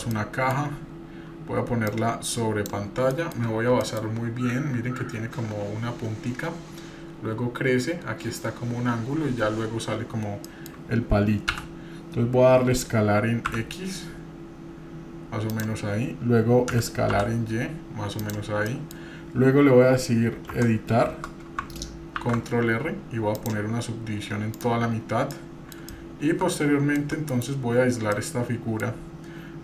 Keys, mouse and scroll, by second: 0.1 middle click, 0.6-1.1 scroll up 2, 1.9-2.7 drag, 3.1-3.4 shift+middle drag, 3.5 scroll up 1, 3.8 shift+middle drag, 10.5 middle click, 11.8 s, 17.8 s, 18.6 middle click, 20.5 Tab, 22.2 ctrl+r, 25.1 scroll up 3, 25.3 middle click, 25.9-27.0 shift+middle drag, 27.3 KP_Divide, 27.7 scroll down 2, 28.1 middle click, 28.9-29.6 scroll up 2.